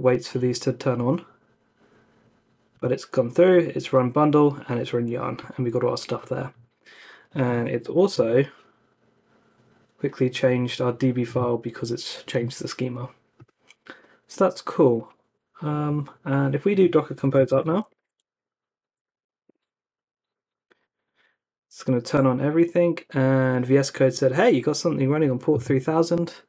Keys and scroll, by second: 16.9-19.7 typing.